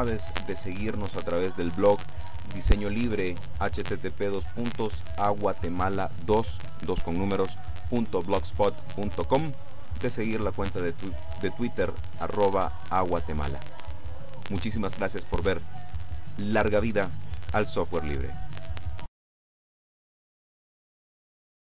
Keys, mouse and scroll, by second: 18.5 click.